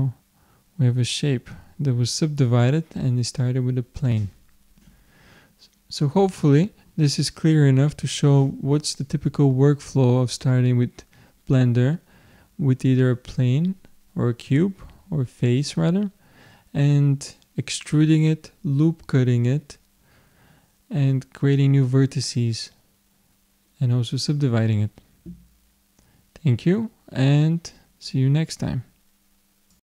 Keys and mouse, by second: 0.1 middle click, 2.5-6.9 middle drag.